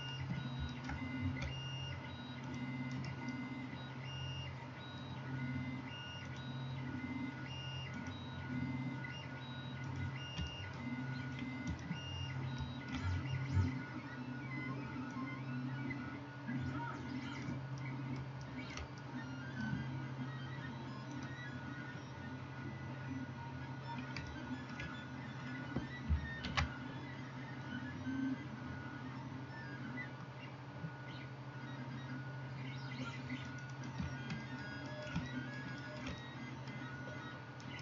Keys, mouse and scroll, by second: 3.0 right click, 26.5 ctrl+b, 33.6 middle click, 33.7 click, 33.9-37.7 middle drag, 37.7 right click.